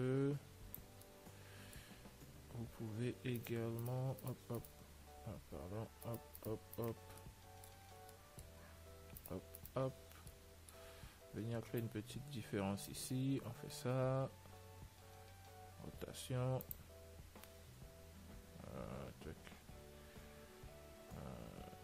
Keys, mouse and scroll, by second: 1.3-3.3 middle drag, 3.7-8.9 right drag, 7.5-10.2 middle drag, 9.5-11.6 right drag, 10.6-13.1 middle drag, 12.1 click.